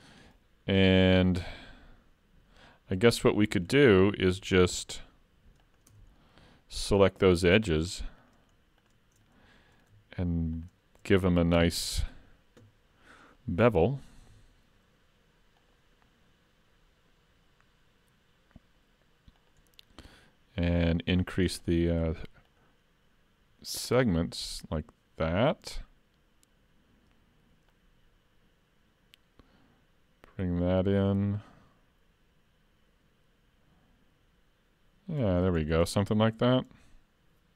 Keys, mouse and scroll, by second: 2.6 middle click, 4.3 s, 5.9 Tab, 6.2 middle click, 7.2 2, 7.6 click, 8.2 shift+click, 9.6 middle click, 10.5 shift+click, 11.6 KP_7, 14.2 ctrl+e, 21.4 click, 21.7 click, 22.5 click, 23.9 click, 27.7 click, 35.6-36.3 scroll down 3, 36.3 Tab, 36.7 middle click.